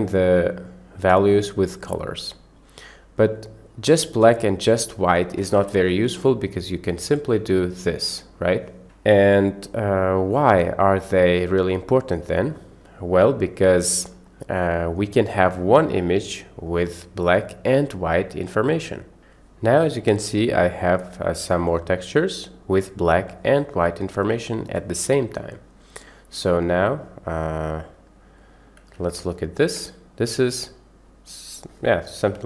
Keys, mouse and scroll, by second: 0.3 click, 0.3 right click, 2.3 drag, 3.4 drag, 4.2-4.8 drag, 6.0 Delete, 7.3-8.8 drag, 9.7 middle click, 10.3 middle click, 11.3 click, 12.5 middle click, 26.7 click, 27.4-28.0 drag, 28.4-28.8 drag, 29.3 ctrl+shift+click, 30.3-31.6 middle drag.